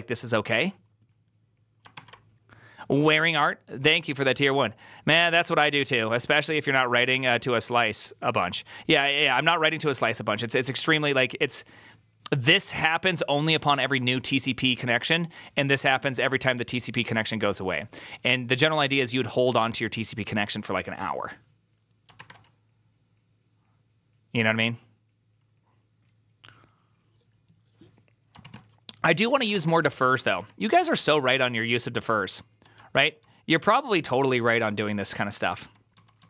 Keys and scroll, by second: 1.8 alt++, 22.1 alt++, 29.0-29.8 typing, 30.0 ctrl+d, 30.0 ctrl+d, 30.2 ctrl+d, 30.7 ctrl+d, 31.1 ctrl+d, 32.2 j, 32.8 ctrl+u, 33.8-36.2 typing.